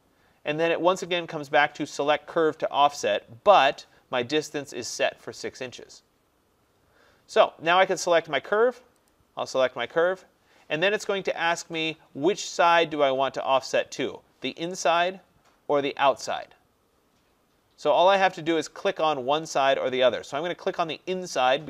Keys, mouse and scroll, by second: 9.2 click.